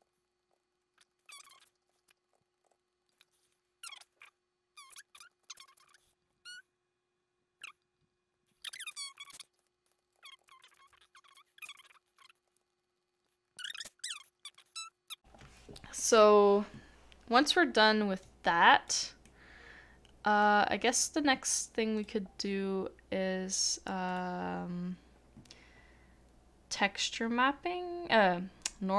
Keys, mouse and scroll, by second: 0.0 ctrl+z, 0.0 ctrl+z, 0.5 ctrl+z, 0.8 middle click, 1.0 scroll down 1, 1.1 middle click, 1.3 ctrl+z, 1.4 middle click, 1.5 ctrl+z, 1.6 middle click, 1.6 scroll down 1, 1.7 scroll up 2, 1.8 shift+middle click, 1.9 scroll down 1, 2.3 ctrl+z, 2.7 ctrl+z, 3.1 middle click, 3.2 scroll down 1, 3.4 middle click, 3.5 scroll up 1, 3.5 middle click, 5.2 shift+middle click, 5.3 shift+middle click, 5.5 shift+middle click, 5.6 shift+middle click, 5.7 middle click, 6.0 shift+middle click, 8.8 middle click, 9.0 shift+middle click, 9.3 shift+middle click, 9.4 middle click, 9.4 scroll up 1, 9.7 shift+middle click, 9.9 shift+click, 10.0 double click, 10.1 ctrl+z, 10.3 ctrl+z, 10.4 ctrl+z, 10.5 double click, 11.8 middle click, 11.9 double click, 12.5 shift+middle click, 12.7 double click, 13.3 middle click, 14.1 middle click, 14.2 shift+middle click, 14.3 scroll down 1, 14.4 shift+middle click, 14.5 shift+middle click, 14.5 shift+middle click, 14.6 scroll up 1, 14.7 middle click, 15.1 shift+middle click, 19.2 shift+middle click.